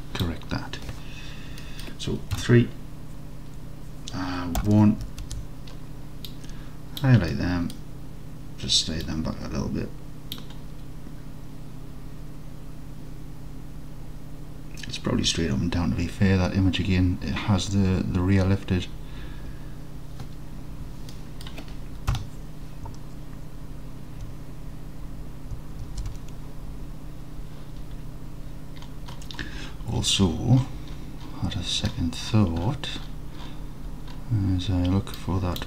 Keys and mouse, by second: 1.7 middle click, 2.4 KP_3, 4.7 1, 5.3 alt+z, 6.4-7.0 drag, 7.4-7.8 middle drag, 9.2-10.4 drag, 21.2 middle drag, 22.2 KP_1, 25.9 alt+z.